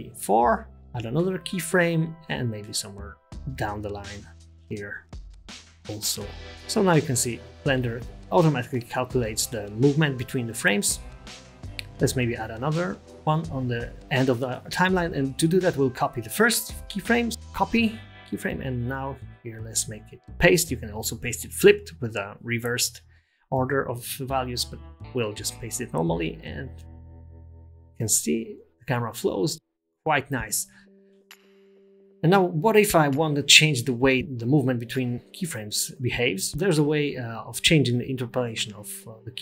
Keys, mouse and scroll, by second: 0.1 middle click, 1.2 g, 2.6 i, 4.0 click, 4.3 middle click, 6.6 space, 10.0 click, 10.4 click, 11.4 click, 13.8 click, 16.2 right click, 21.3 right click, 21.5 right click, 26.7 click, 27.3 space.